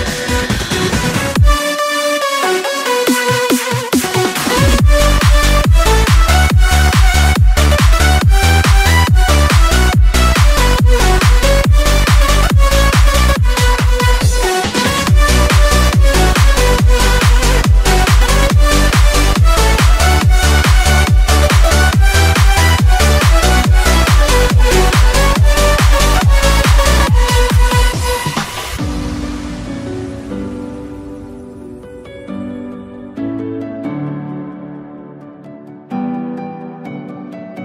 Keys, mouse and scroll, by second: 0.6 s, 2.6 space, 4.7-7.3 alt+middle drag, 5.5 z, 7.3-9.9 drag, 7.3 g, 8.6 s, 9.2 g, 9.7 a, 9.8 Tab, 9.9-10.9 middle drag, 10.1 a, 11.0-12.6 alt+middle drag, 12.5 KP_1, 12.6-15.6 alt+shift+drag, 13.1 g, 14.1 KP_1, 14.7 a, 15.6 middle click, 15.8 Tab, 15.9 click, 16.6-18.4 alt+shift+middle drag, 18.2 l, 18.4 click, 18.6 alt+middle click, 18.6 h, 18.9 alt+click, 19.2-25.5 middle drag, 20.4 space, 21.2 a, 21.4 Tab, 22.1 Tab, 22.4-23.5 typing, 22.9 alt+h, 23.2 Tab, 25.5-27.5 drag, 28.0-37.6 alt+drag.